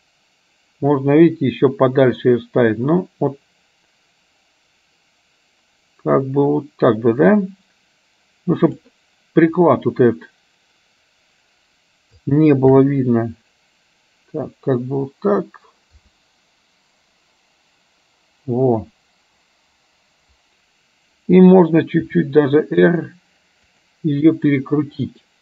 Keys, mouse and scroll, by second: 12.8 shift+f.